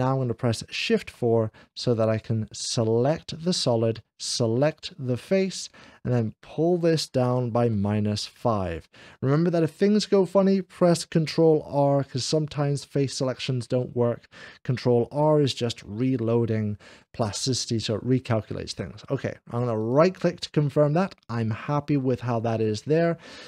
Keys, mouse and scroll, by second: 0.9 4, 0.9 d, 2.0-3.9 drag, 2.3 1, 4.4 shift+click, 8.1 click, 19.6-20.7 right drag, 20.5-23.1 middle drag.